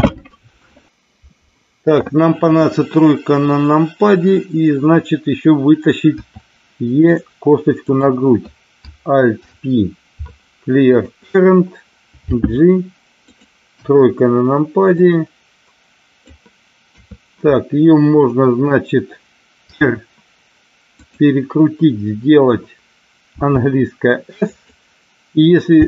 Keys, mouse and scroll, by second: 6.1 e, 7.8 click, 9.4 alt+p, 12.4 g, 13.1 click, 13.7 KP_1, 15.0-16.3 drag, 16.9 KP_3, 19.6 r, 21.0 click, 23.4 s, 24.5 click, 25.7 g.